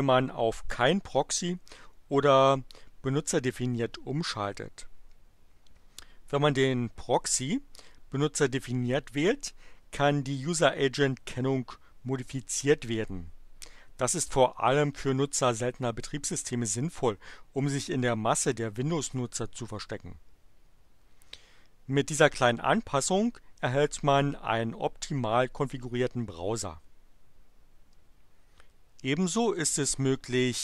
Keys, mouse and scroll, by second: 29.1 click.